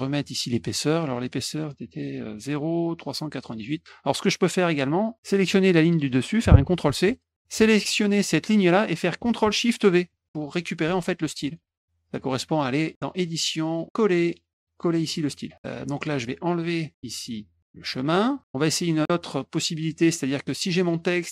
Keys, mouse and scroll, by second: 1.2 click, 6.8 shift+c, 7.8 click, 10.0 ctrl+shift+v, 13.2 click, 16.6 click, 18.3 click, 18.6 click, 19.9 click, 20.7 click.